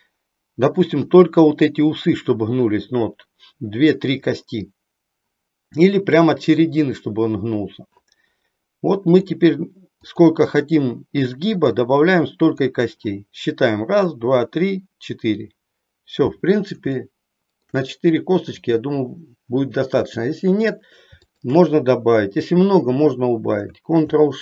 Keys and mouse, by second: 8.9 click, 9.9 click, 11.6 click, 16.9 shift+middle click, 18.6 click, 21.2 shift+click.